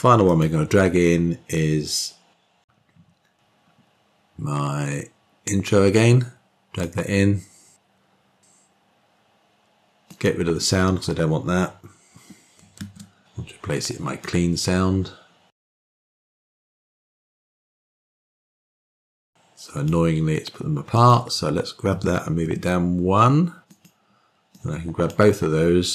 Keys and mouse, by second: 11.2 click, 12.7 typing, 18.7 click, 20.0-21.0 drag, 22.0 click, 25.6-25.9 drag.